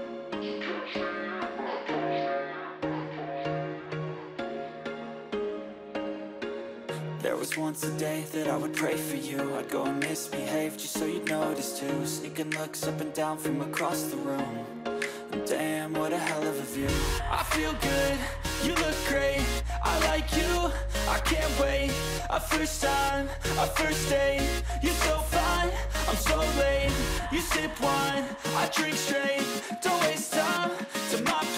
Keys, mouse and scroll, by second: 3.6-4.0 scroll down 1, 4.0-6.5 scroll up 1, 10.7 double click, 16.4 double click, 19.2 ctrl+j, 19.7 ctrl+j, 20.9 shift+click, 22.0 ctrl+g, 23.7-24.2 scroll down 4, 25.1 scroll down 2, 25.2 right click, 29.0 shift+click.